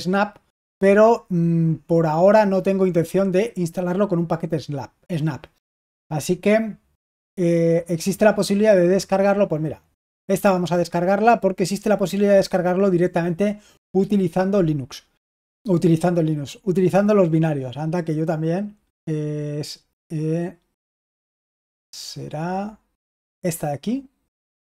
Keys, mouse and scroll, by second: 10.5-11.1 scroll down 1, 11.1-24.7 scroll down 1.